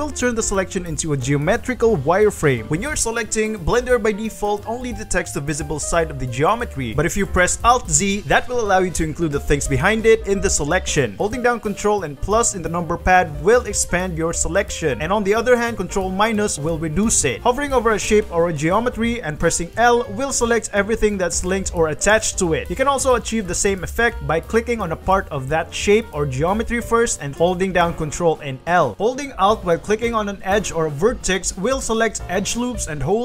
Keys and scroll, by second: 2.9 alt+3, 7.5 alt+z, 9.2 alt+z, 11.3 ctrl+KP_Add, 11.8 ctrl+KP_Add, 12.0 ctrl+KP_Add, 12.6 ctrl+KP_Add, 13.0 ctrl+KP_Add, 13.8 ctrl+KP_Add, 14.1 ctrl+KP_Add, 14.5 ctrl+KP_Add, 14.8 ctrl+KP_Subtract, 15.1 ctrl+KP_Subtract, 15.8 ctrl+KP_Subtract, 16.4 ctrl+KP_Subtract, 16.9 ctrl+KP_Subtract, 17.5 ctrl+KP_Subtract, 17.9 l, 18.3 Escape, 18.5 l, 19.8 Escape, 20.5 Escape, 20.5 shift+a, 20.8 l, 21.2 Escape, 21.4 l, 22.0 alt+a, 22.4 Escape, 22.6 l, 23.3 alt+shift+a, 23.5 l, 24.5 ctrl+l, 25.8 ctrl+l, 27.3 alt+a, 27.9 ctrl+l, 29.1 ctrl+l, 31.8 ctrl+alt+1.